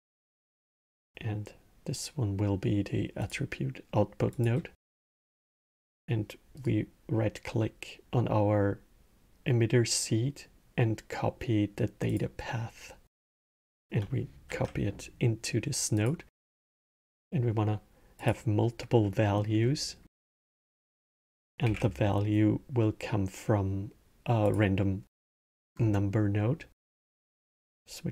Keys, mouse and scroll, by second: 6.3-9.5 right drag, 12.9-15.8 drag, 16.5 scroll, 17.9 click, 18.8 middle click, 19.4 scroll, 19.8 middle click, 20.4 scroll, 20.7-21.4 middle drag, 21.4 shift+a, 25.5 scroll.